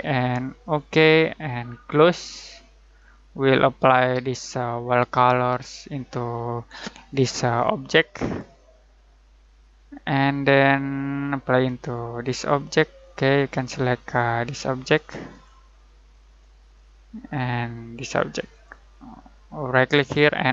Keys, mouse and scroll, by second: 7.1 click, 9.8-10.9 scroll down 1, 12.1 click, 16.0-16.3 scroll up 1, 18.5 click, 19.7 right click.